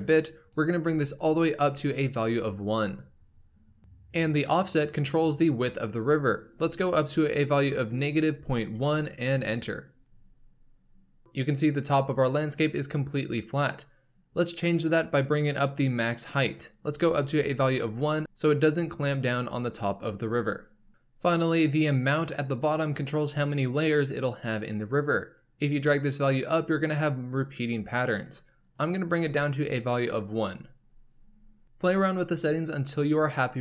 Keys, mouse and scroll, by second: 0.4 click, 5.9-9.0 drag, 16.4-17.5 drag, 20.9-23.5 middle drag, 25.3-28.5 drag, 28.7-30.0 drag.